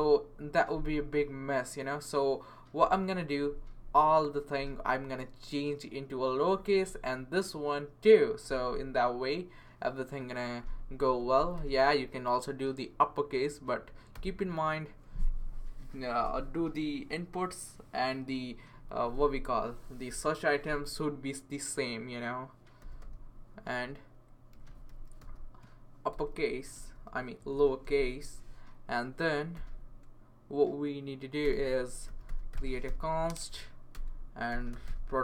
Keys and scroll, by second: 11.1-12.0 typing, 14.1 w, 22.5-23.5 typing, 24.5-28.1 typing, 29.5 ;, 31.4 Return, 31.8-35.2 typing.